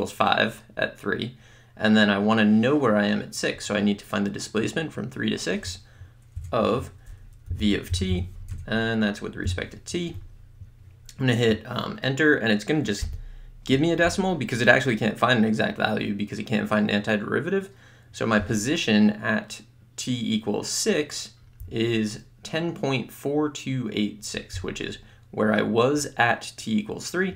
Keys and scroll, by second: 6.4 Tab, 7.3-9.5 typing, 13.0 Return.